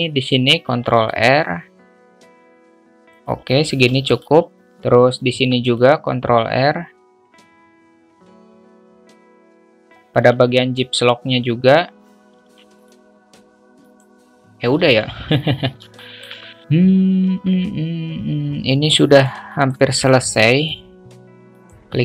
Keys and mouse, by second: 0.6 ctrl+r, 3.8 ctrl+r, 5.2 ctrl+r, 7.5 ctrl+r, 9.6 Tab, 12.3 ctrl+r, 14.8 ctrl+z, 16.0 shift+middle click, 16.1 alt+shift+click, 16.5 Tab, 16.6-19.6 alt+middle drag, 20.3 middle click.